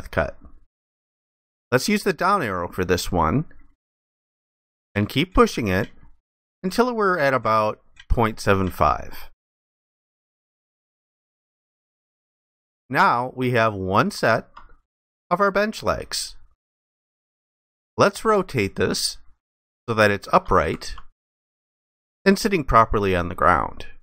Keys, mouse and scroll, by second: 10.6 alt+click, 12.7 alt+click, 19.1 ctrl+click, 21.1 alt+click.